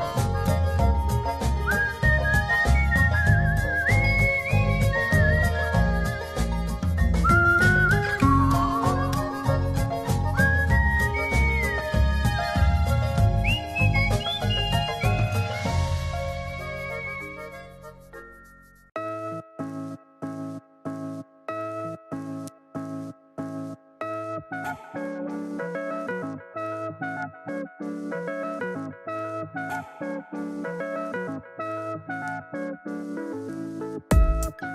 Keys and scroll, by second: 16.3 shift+super+i, 19.8 [, 33.1 [.